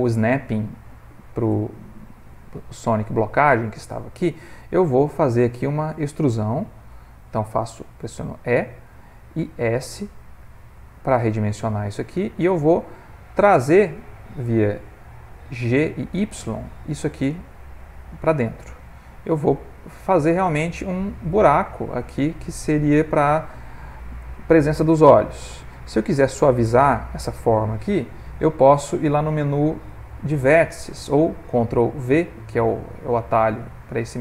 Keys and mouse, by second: 2.8 click, 3.6 click, 4.8 middle click, 5.4 ctrl+middle click, 9.3 e, 12.9-13.7 middle click, 13.5 middle click, 14.1 middle click, 15.7 g, 21.2 middle click, 26.5 middle click, 33.7 click.